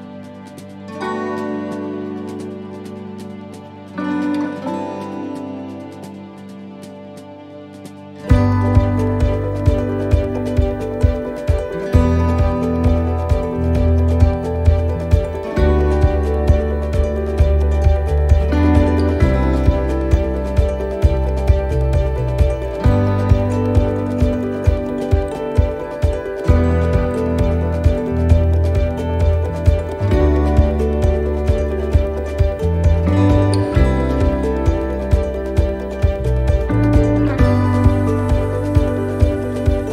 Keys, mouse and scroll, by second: 0.0-0.5 scroll up 2, 0.5 middle click, 1.2 shift+middle click, 1.8 scroll up 1, 2.4 scroll up 1, 2.5 shift+middle click, 3.7 right click, 4.6 shift+right click, 5.6 right click, 11.5 shift+middle click, 12.6 shift+right click, 13.8 shift+middle click, 14.9 shift+right click, 16.0 shift+middle click, 16.8 middle click, 17.8 shift+middle click, 18.3-18.8 scroll up 2, 19.9 middle click, 22.9 shift+right click, 26.5 middle click, 27.9 shift+right click, 29.0 shift+middle click, 30.0 shift+right click, 30.5 shift+middle click, 31.5 shift+right click, 32.1 shift+middle click, 33.5 s, 35.6 middle click, 35.6 scroll up 1, 37.7 middle click, 39.5 right click.